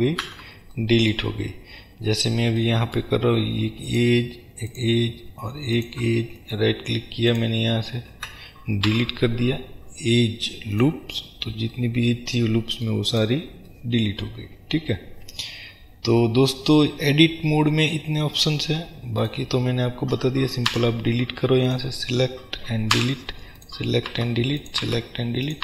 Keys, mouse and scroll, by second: 0.4 ctrl+z, 4.0 shift+click, 4.7 shift+click, 5.9 shift+click, 6.4 right click, 7.4 click, 8.2 ctrl+z, 11.9-13.2 middle drag, 13.2 click, 13.8-18.5 middle drag, 15.8-16.3 scroll down 2, 18.5-21.9 drag, 20.8 Delete, 23.1 Delete, 23.7 click, 24.3 Delete, 24.7 drag, 24.9 Delete, 25.5 click.